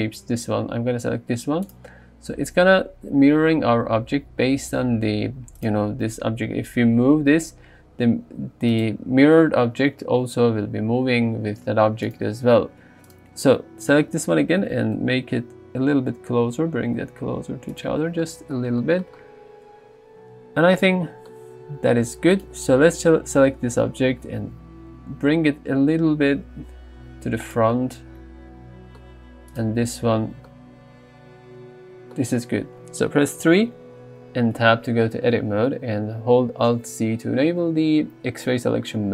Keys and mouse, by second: 1.7 click, 5.6 click, 7.5 g, 14.7 g, 15.0 x, 18.8 shift+middle drag, 22.4 click, 24.3 g, 24.6 y, 25.5 x, 26.5 y, 33.5 KP_3, 34.7 Tab, 36.8 alt+z.